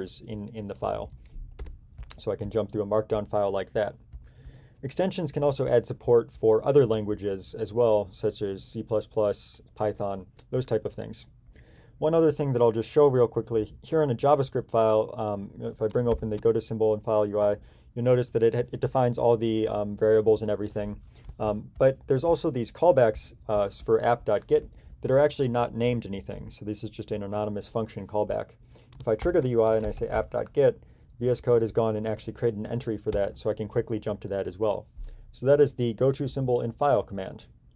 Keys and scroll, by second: 0.6 Down, 0.8 Down, 0.9 Down, 1.1 Down, 1.5 e, 16.1 shift+super+o, 21.2 Escape, 29.2 shift+super+o, 29.4-30.6 typing, 33.1 Return.